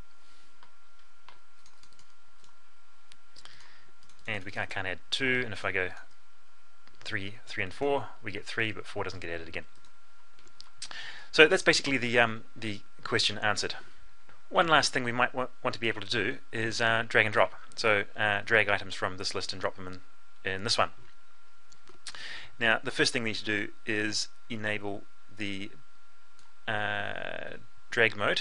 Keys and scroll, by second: 10.7 F12.